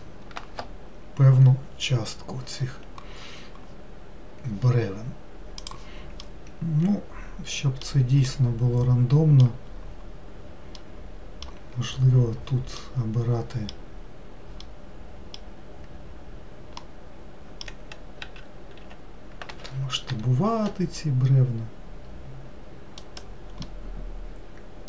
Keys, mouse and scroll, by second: 0.3-1.6 scroll down 1, 6.7-12.4 middle drag, 12.4-12.7 scroll up 2, 13.3-18.7 middle drag, 18.7 s, 24.1-24.8 middle drag.